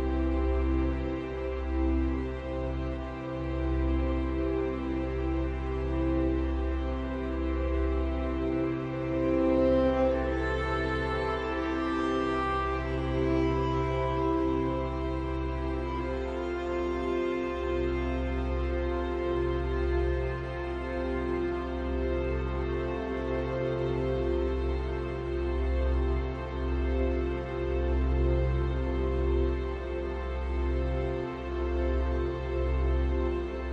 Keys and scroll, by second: 0.0 ctrl+j, 1.1 ctrl+t, 22.1 ctrl+u.